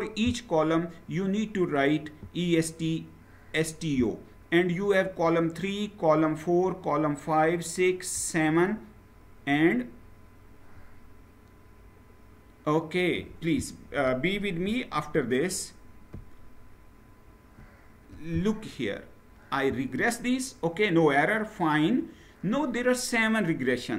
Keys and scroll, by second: 14.7 shift+Up, 15.8 shift+Right, 16.5-17.8 shift+Right.